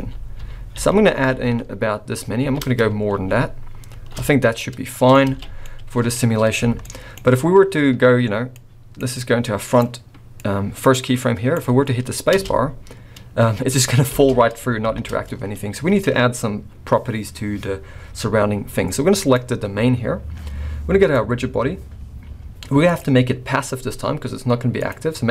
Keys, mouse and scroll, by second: 0.0-1.1 typing, 1.5 scroll down 5, 2.5 shift+r, 3.2 shift+r, 3.9 shift+r, 4.4-4.8 scroll down 2, 4.6 middle click, 5.1 scroll up 3, 5.3 alt+a, 5.6 middle click, 6.1-6.6 scroll up 2, 6.8 shift+middle click, 8.5 click, 9.2 click, 10.3 click, 11.7-12.3 scroll down 3, 12.3 space, 14.1 space, 14.8 shift+Left, 15.6-17.1 scroll up 2, 19.2 click, 20.9 click, 22.9 click.